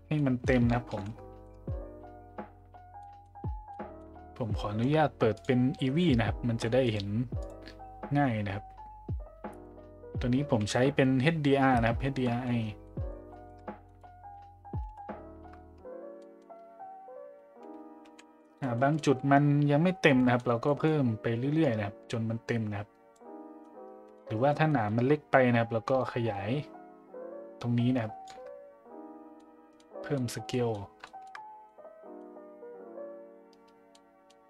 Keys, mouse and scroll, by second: 0.1 middle drag, 1.0 shift+z, 1.4 middle drag, 3.0 middle click, 3.7 middle click, 5.4 click, 6.9-8.3 drag, 12.2 middle drag, 12.8 middle drag, 13.3 shift+middle drag, 14.8 KP_5, 15.3 a, 16.2 middle drag, 18.3 middle click, 18.7 middle drag, 20.2 middle click, 20.7 middle click, 21.6-23.1 drag, 23.6 middle click, 24.7 middle drag, 26.1-28.2 shift+drag, 29.4-29.8 middle drag, 30.1 middle click, 30.5 middle drag, 31.0 shift+middle drag, 31.6-32.2 middle drag, 33.9-34.3 middle drag.